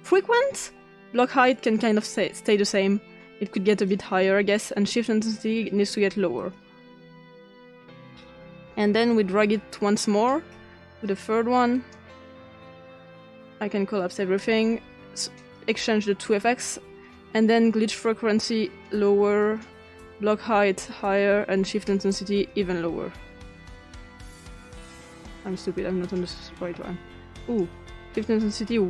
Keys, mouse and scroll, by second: 0.0 click, 3.8 click, 6.4 click, 6.6 click, 9.9-13.1 drag, 13.4 click, 14.0 click, 15.4 click, 18.5 click, 19.4 click, 20.9 click, 22.4 click, 24.3 click, 25.3 click, 26.2 click, 26.8-27.3 drag, 27.5 click.